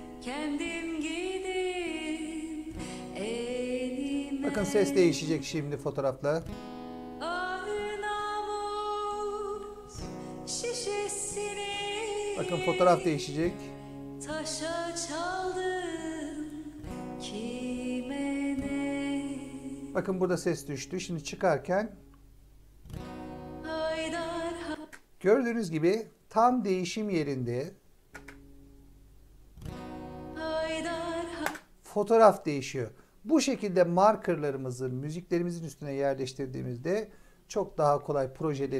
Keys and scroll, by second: 24.6 space, 28.0 space, 31.3 space.